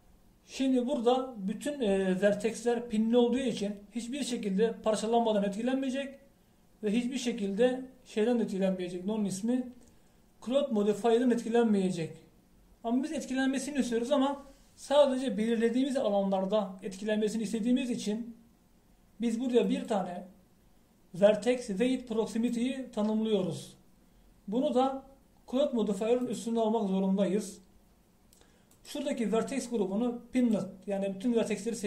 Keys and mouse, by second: 20.7-23.6 drag, 27.3-31.8 drag.